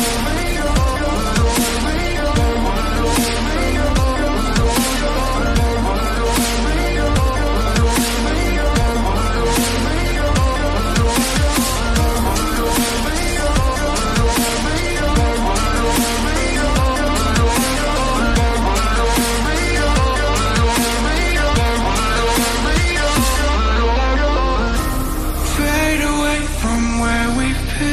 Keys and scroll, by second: 6.1 ctrl+a, 9.5 ctrl+a, 9.9 ctrl+d, 17.5 ctrl+d.